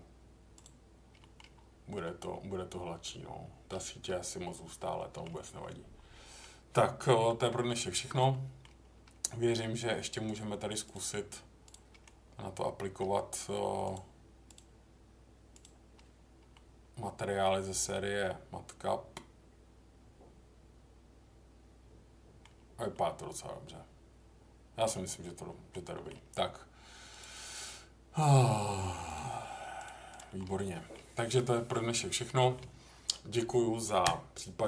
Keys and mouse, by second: 1.2 middle click, 2.0-3.7 middle drag, 4.9 middle click, 5.6 middle click, 7.3 Tab, 8.3 middle click, 10.3-11.8 drag, 12.0-13.0 middle drag, 13.9-15.9 drag, 16.5-22.4 middle drag, 22.9-24.8 middle drag, 25.2-25.7 middle drag, 25.9 middle click, 27.1-29.9 drag, 30.1 click, 30.2 middle click, 30.7 middle click, 32.2 middle click.